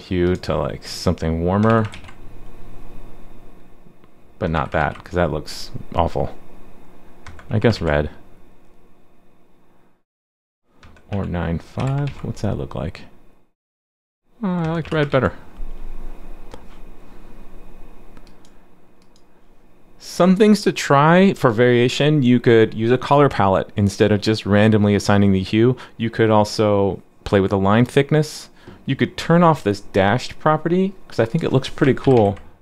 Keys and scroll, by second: 1.9 super+s, 4.8 super+s, 7.7 super+s, 12.0 super+s, 15.1 super+s, 32.0 super+/, 32.1 super+s.